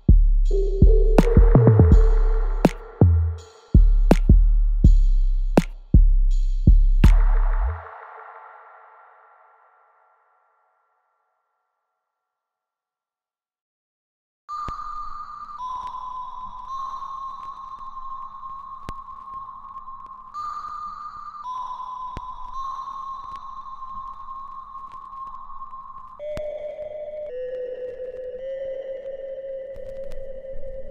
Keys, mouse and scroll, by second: 0.2 ctrl+z, 1.2 click, 1.6 right click, 2.6 click, 3.5 right click, 4.4 click, 8.2-15.2 ctrl+drag, 15.2-16.6 right drag, 17.0 alt+click, 22.7 alt+click, 24.3 alt+right click, 24.9 alt+middle click, 25.4 alt+click, 26.2 alt+middle click, 26.7-28.1 alt+drag, 28.1 alt+middle click, 28.7 alt+right click, 29.1 alt+click, 29.7-30.9 alt+middle drag.